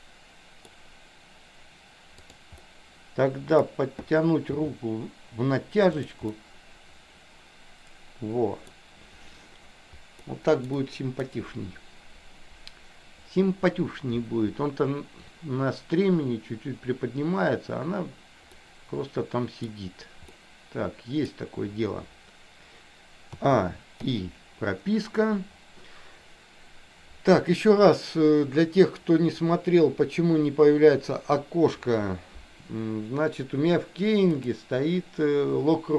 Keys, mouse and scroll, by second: 2.6-3.8 middle drag, 4.7 g, 6.4-7.4 scroll up 1, 7.4-8.8 middle drag, 10.3 scroll up 1, 10.4 middle click, 10.8 scroll down 1, 10.9 middle click, 18.7-19.9 middle drag, 20.4-21.5 middle drag, 23.5 a, 24.2 i, 34.5-35.7 drag.